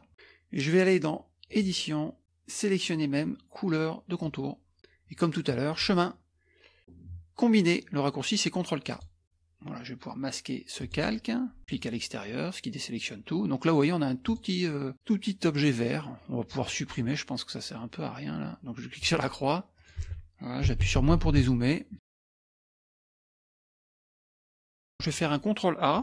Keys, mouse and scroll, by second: 1.5 click, 4.2 click, 5.7 click, 8.9 click, 10.8 click, 11.6 click, 14.2 click, 19.0 click, 19.8 click, 20.7 KP_Subtract, 21.0 KP_Subtract, 21.1 KP_Subtract, 21.3 KP_Subtract, 21.9 scroll up 1, 22.1 middle click, 23.2 click, 24.4 KP_Subtract, 24.5 KP_Subtract, 24.9 middle click.